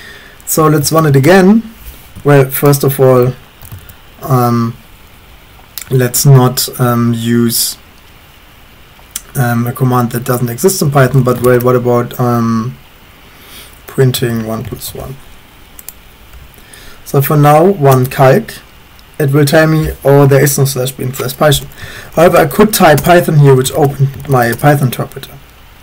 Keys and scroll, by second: 0.4-1.6 typing, 3.9 ctrl+BackSpace, 10.6-11.9 typing, 13.7-14.8 typing, 17.9 Return, 21.7-24.8 typing.